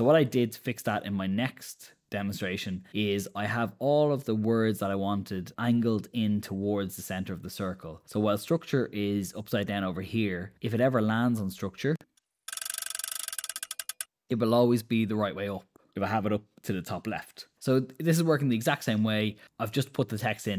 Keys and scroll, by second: 0.3 Escape, 11.3 super+Return.